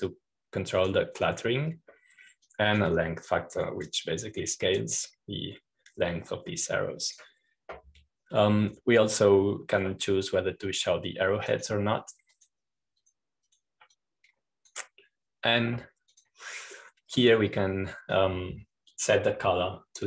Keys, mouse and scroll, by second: 4.3-9.5 drag, 13.4-17.5 drag, 18.0-19.7 drag.